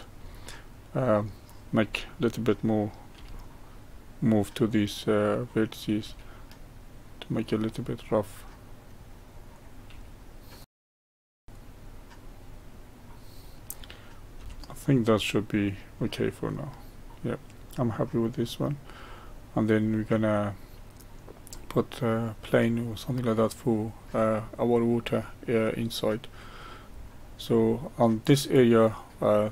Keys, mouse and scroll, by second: 0.0 click, 0.5-3.2 middle drag, 3.2 g, 5.7 click, 6.0 g, 7.8-9.5 middle drag, 9.5 click, 9.9 g, 10.6 click, 10.6 middle click, 10.7 g, 11.3 shift+middle click, 11.4 g, 12.0-14.4 middle drag, 14.4 Tab, 15.0-18.0 middle drag, 21.5-24.5 middle drag, 25.2-29.5 middle drag.